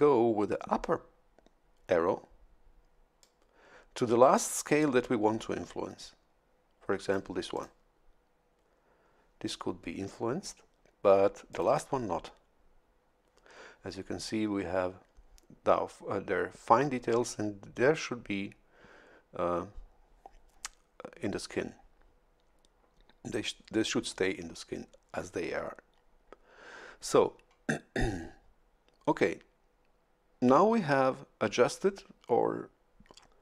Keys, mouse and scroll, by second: 3.2-7.3 drag, 7.5 click, 11.5 click.